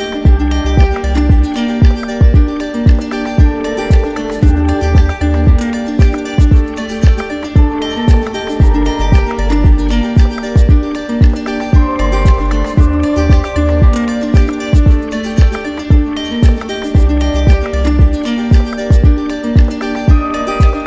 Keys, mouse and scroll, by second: 2.8 click, 5.7 click, 9.2 click, 12.6 click, 14.9 right click, 16.5 right click, 17.9 right click, 18.7 ctrl+click, 19.9 ctrl+d, 20.2 ctrl+d.